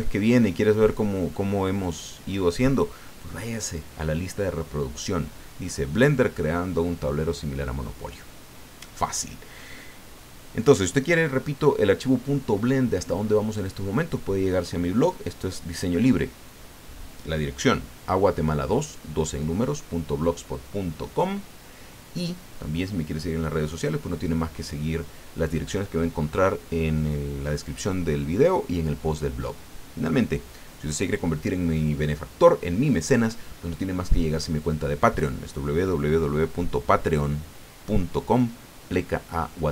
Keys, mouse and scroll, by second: 10.6 click, 11.3 scroll down 1, 11.6 click, 12.6 scroll up 1.